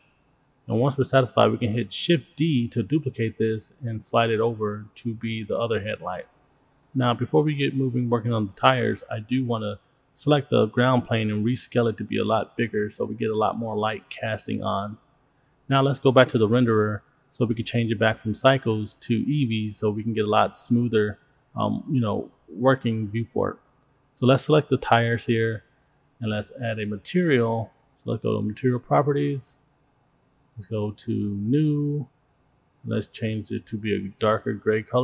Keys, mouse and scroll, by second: 1.3 click, 2.6-4.2 drag, 6.2 shift+d, 7.5-10.3 drag, 11.1 click, 12.2 click, 12.8 s, 15.3 click, 17.1 click, 18.9-19.5 scroll up 2, 20.2-21.9 drag, 22.4 shift+middle click, 22.4 click, 24.6 Tab, 25.2 click, 29.4 click, 32.1 click, 33.2 click.